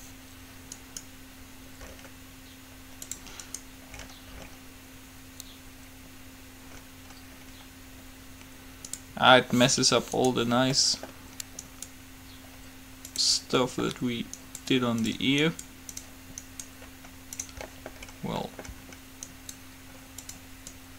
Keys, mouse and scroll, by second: 0.8-2.4 right drag, 4.7 right click, 10.4-12.7 right drag, 10.9-12.7 middle drag, 14.6-17.9 right drag, 17.9 middle click, 19.3 middle click.